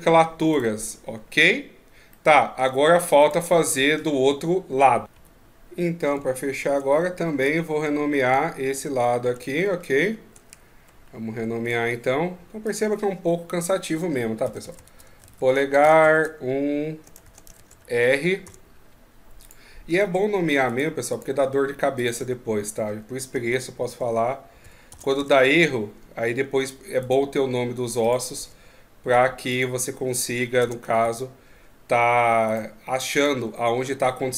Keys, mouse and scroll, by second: 0.3 right click, 1.9 middle click, 3.0 right click.